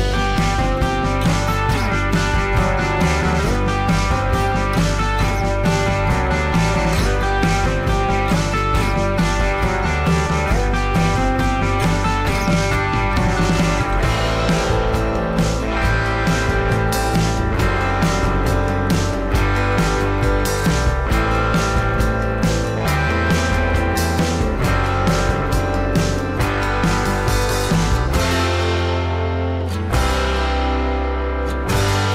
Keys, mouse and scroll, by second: 10.4 alt+scroll up 1, 21.1 alt+click, 28.0 alt+scroll down 1, 29.6 alt+scroll up 1.